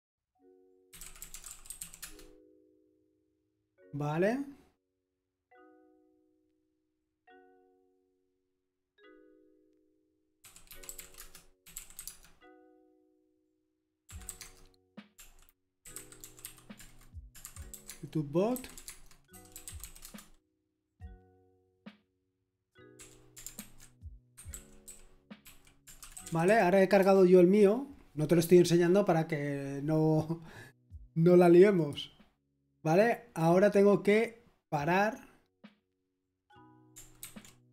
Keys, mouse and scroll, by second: 0.6-2.3 typing, 10.6-12.4 typing, 13.8-20.3 typing, 21.9-22.9 typing, 23.5 ctrl+alt+v, 24.3 Escape, 24.5-27.5 typing, 31.7 click, 35.5 click, 36.3-37.7 drag, 37.6-37.7 typing.